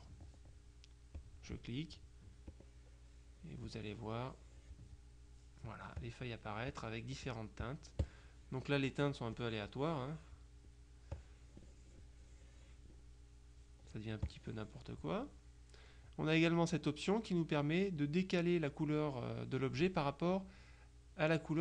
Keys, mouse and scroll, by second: 1.2 click, 2.6-5.3 drag, 6.1-7.9 drag, 8.1 click, 11.2-13.4 drag, 14.4 click.